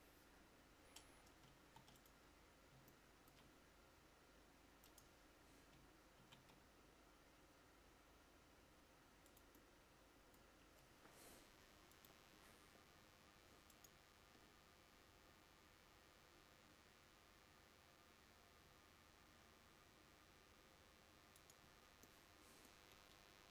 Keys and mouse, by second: 1.7 ctrl+s, 6.3 shift+d.